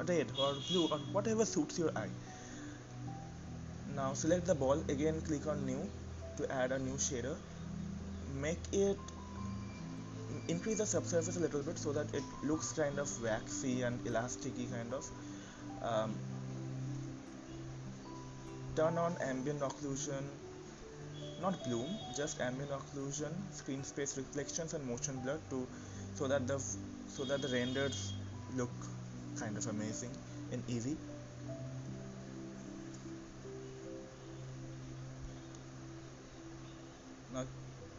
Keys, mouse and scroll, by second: 0.4 click, 2.7 click, 5.3-11.3 drag, 17.4 click, 18.7 click, 20.9 click, 23.7 click, 24.3 click, 28.2 click, 31.8-35.9 drag, 37.3-37.9 drag.